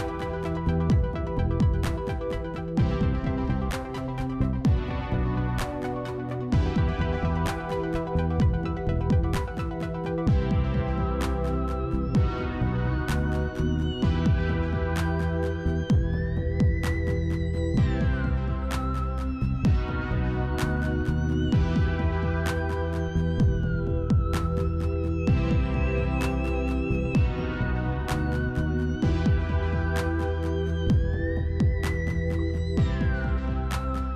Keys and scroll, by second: 3.7 s, 7.0 i.